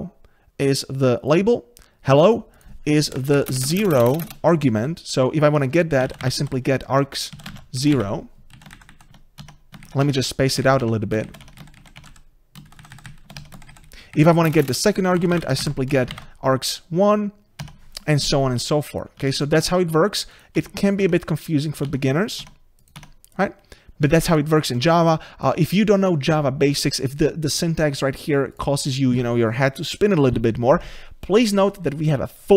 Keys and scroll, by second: 9.4 Tab, 19.2 Tab.